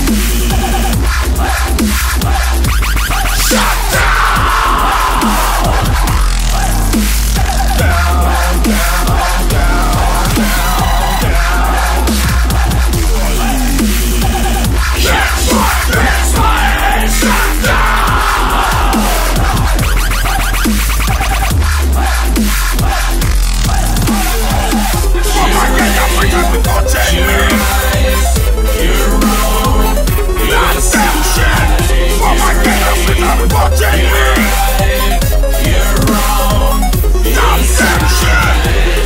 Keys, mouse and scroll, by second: 4.8-14.8 drag, 16.2-18.8 typing.